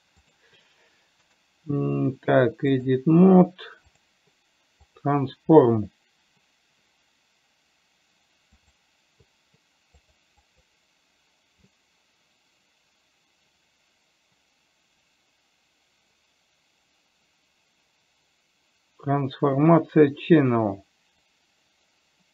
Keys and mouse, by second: 0.5 click, 2.1-22.3 right drag.